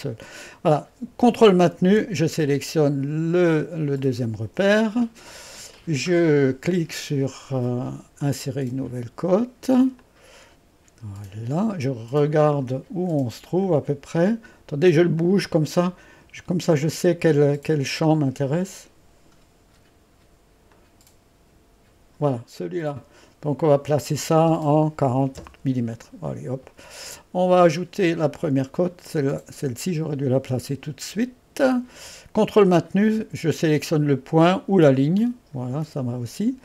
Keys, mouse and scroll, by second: 4.1 click, 8.3 click, 10.0-13.0 drag, 13.7 click, 15.2-16.3 drag, 18.2 click, 19.5 click, 20.8-22.3 drag, 23.7 click, 28.3-29.1 typing, 29.1 click, 35.3 click.